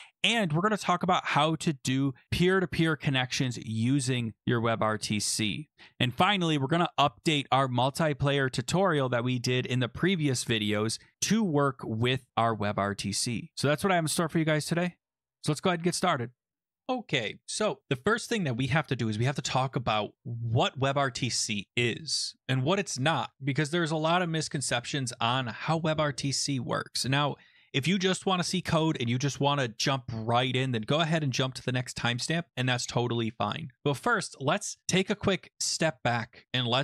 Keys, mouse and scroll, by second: 0.0 ctrl+x, 1.5 click, 2.1 click, 2.4 click, 2.6 click, 3.0 click, 3.3 click, 3.8 click, 3.9 click, 4.0 ctrl+c, 4.3 click, 4.8 click, 5.0 click, 5.1 ctrl+v, 5.5 click, 7.3 click, 7.9 click, 8.8 click, 9.4 click, 9.7 click, 10.1 click, 10.5 click, 10.7 click, 10.7 click, 11.0 click, 11.1 click, 11.1 click, 11.4 click, 11.5 click.